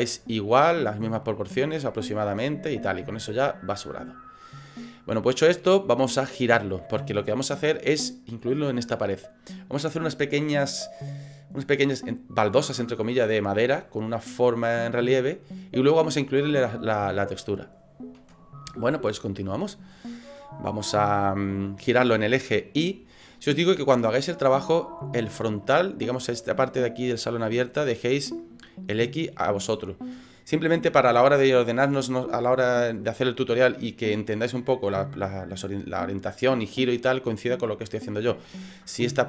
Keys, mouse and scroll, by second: 0.0 middle click, 4.6 middle click, 5.4 scroll up 3, 7.9 scroll down 4, 17.9 scroll up 3, 18.7 shift+middle click, 23.3-23.7 scroll down 6, 23.9 middle click, 23.9 scroll up 1.